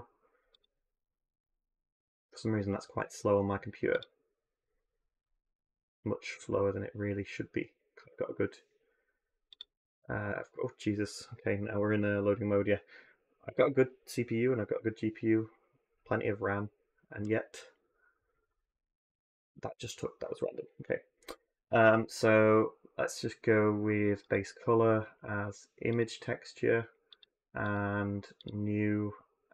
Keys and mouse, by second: 0.3-18.4 drag, 27.0 click, 28.3-29.5 drag.